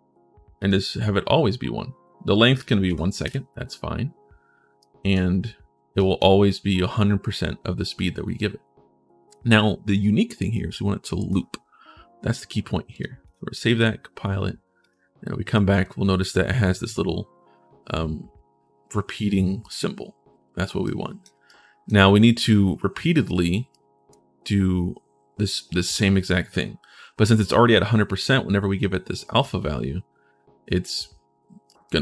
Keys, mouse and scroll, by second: 0.4 click, 2.4 click, 2.7 1, 4.6 right click, 5.0-5.7 scroll down 1, 5.7 right click, 11.0 click, 11.0 right click, 12.7 click, 13.0 click, 14.6 click, 15.3 right click, 20.6 right click, 21.2 right click, 23.5 right click, 31.4 right click, 31.9 right click.